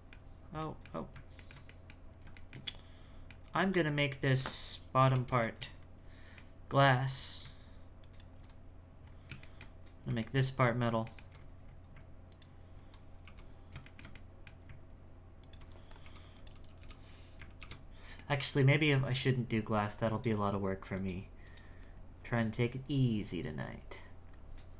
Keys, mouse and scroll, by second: 0.3 scroll down 1, 0.6 middle click, 0.9-1.3 scroll down 1, 1.3 alt+middle click, 2.1 scroll up 1, 2.3-3.5 shift+middle drag, 3.5-5.1 scroll up 7, 5.4 shift+middle click, 5.8-6.3 scroll up 1, 6.3 scroll up 1, 6.5-8.0 middle drag, 8.0 alt+right click, 9.0-9.4 scroll up 2, 9.4 shift+middle click, 9.8-10.2 scroll up 1, 10.2-11.3 shift+middle drag, 11.5-12.3 scroll up 6, 12.3 alt+right click, 13.5-13.8 scroll down 1, 13.8-15.4 shift+middle drag, 15.4 alt+right click, 16.0 h, 16.3 right click, 16.8 l, 17.6 alt+h, 17.9 scroll down 2, 18.2-20.1 middle drag, 20.1 click, 20.9 click, 21.4 click, 22.4-24.7 drag.